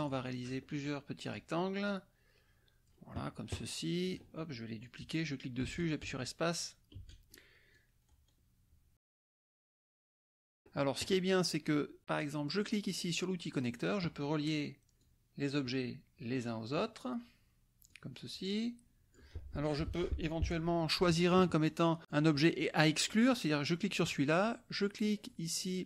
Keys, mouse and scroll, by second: 0.8 click, 1.8-3.0 drag, 4.0 click, 4.8-7.3 drag, 5.8 space, 7.0 space, 7.7 click, 8.0-8.4 scroll down 2, 10.1 click, 13.5 click, 15.0-16.9 drag, 17.9-19.3 drag, 22.0 click, 23.1 click.